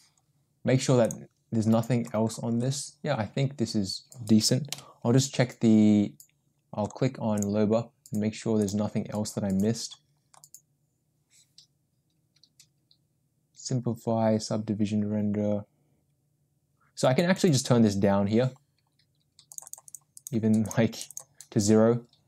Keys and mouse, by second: 1.0 click, 4.7 n, 7.4 click, 20.0 click.